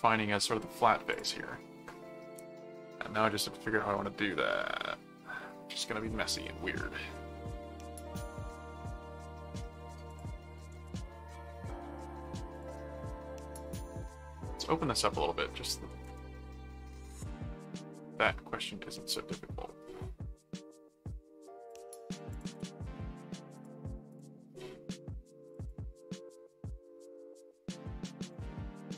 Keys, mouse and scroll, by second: 1.1 click, 10.1 click, 11.1 ctrl+s, 11.4 click, 12.5 click, 13.6 click, 14.1 middle click, 15.0 click, 17.8-21.4 middle drag, 21.7 click, 22.3 ctrl+click, 22.5 ctrl+s, 23.5 click, 25.4 click.